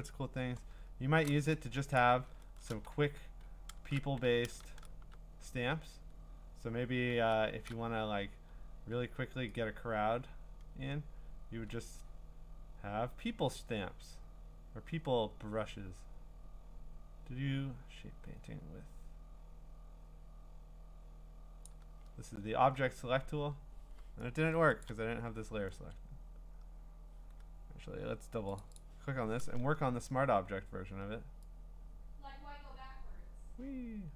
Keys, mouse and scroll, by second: 0.1 click, 0.8-1.4 scroll, 2.0 click, 2.2 scroll, 2.9 w, 4.6 shift+w, 6.5 w, 7.1 w, 21.6 click, 24.3 ctrl+d, 24.8 click, 28.6 click, 28.8 click.